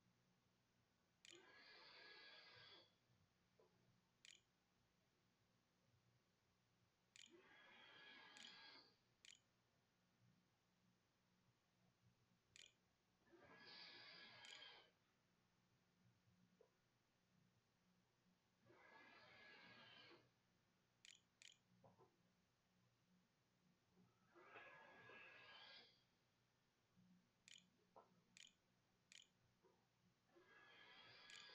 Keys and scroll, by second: 0.0-2.3 typing, 3.8 End, 4.6 Return, 7.5 shift+Return, 7.7-9.7 typing, 9.0 Return, 11.5-15.2 typing, 19.3 ], 19.7 ;, 20.8 /, 23.3 ., 25.9-28.6 typing, 29.9-31.5 typing.